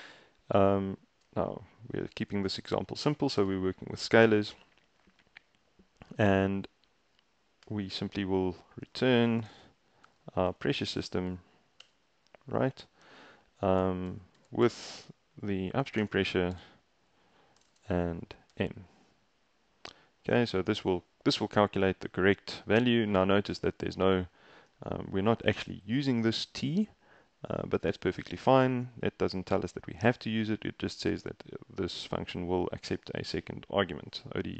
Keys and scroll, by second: 2.5 :, 3.4 Return, 8.6-10.8 typing, 11.4 Down, 11.9 Return, 13.9-18.6 typing.